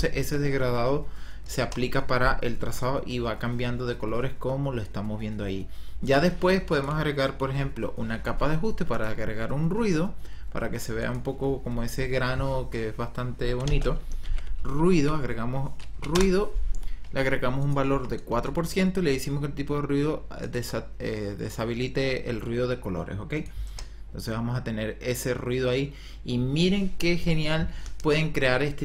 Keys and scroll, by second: 1.6 KP_0, 13.9-15.5 typing, 15.8 Down, 16.1 Return, 17.8 KP_4, 18.2 Return, 23.6 KP_0.